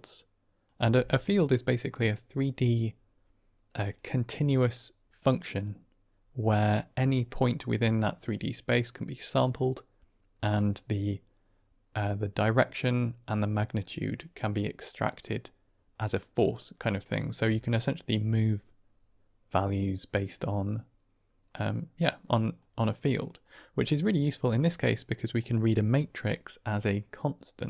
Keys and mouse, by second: 22.6 middle click, 24.0 middle click, 25.4-27.6 drag.